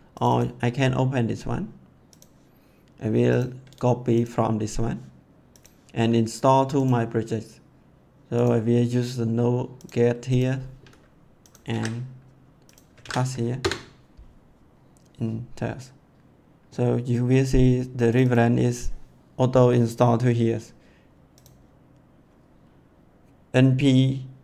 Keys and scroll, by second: 11.6 ctrl+v, 12.9 ctrl+v, 13.5 Return.